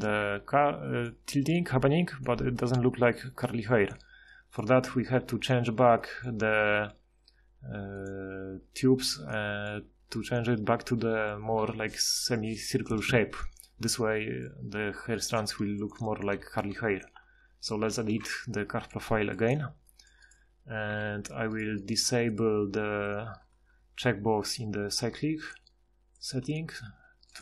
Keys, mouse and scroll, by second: 17.8 ctrl+shift+h, 20.9 KP_Divide.